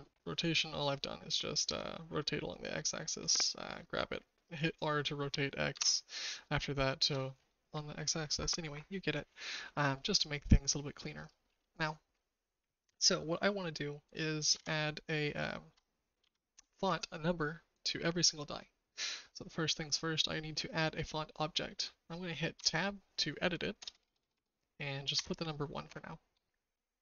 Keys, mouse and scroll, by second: 1.6 r, 6.5 shift+middle click, 14.5 shift+a, 22.5 Tab, 23.7-25.1 typing, 25.8 KP_Enter.